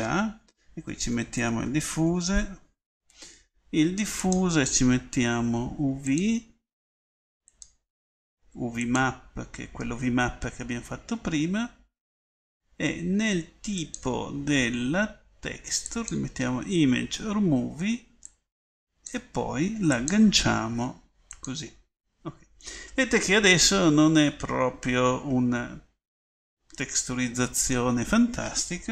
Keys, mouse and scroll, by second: 1.4 f, 4.3-4.8 drag, 4.8-7.0 middle drag, 14.4-16.0 middle drag.